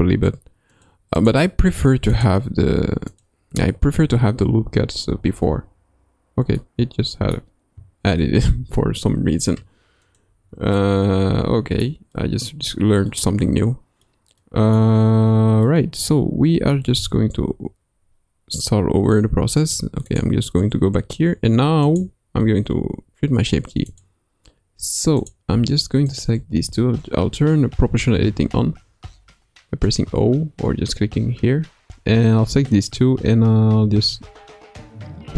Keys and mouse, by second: 1.2 drag, 4.1 Tab, 5.1 Tab, 5.5 Tab, 6.6 middle click, 8.2 ctrl+r, 10.8-12.0 middle drag, 12.1 middle click, 13.1-14.2 middle drag, 14.6 middle click, 15.8-16.9 middle drag, 17.0 Tab, 19.6 click, 22.4 Tab, 23.9 click, 25.2 click, 26.1 shift+click, 28.1 o, 29.9 click, 33.8 g.